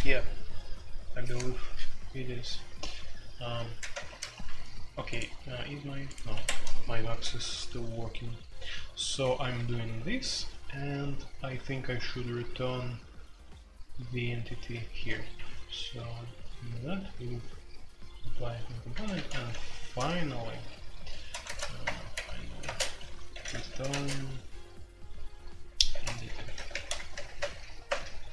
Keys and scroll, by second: 0.0-28.3 typing, 3.9 ctrl+g, 4.0 ctrl+g, 6.3 Escape, 9.4 Escape, 18.9 Return, 21.4 ctrl+n, 21.8 Return, 22.1 Tab.